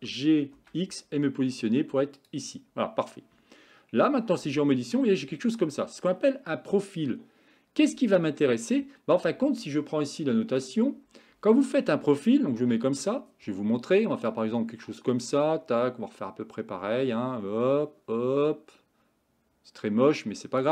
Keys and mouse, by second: 4.1 Tab, 8.2-8.8 middle drag, 10.6 click, 12.6 KP_1, 14.3-20.7 drag.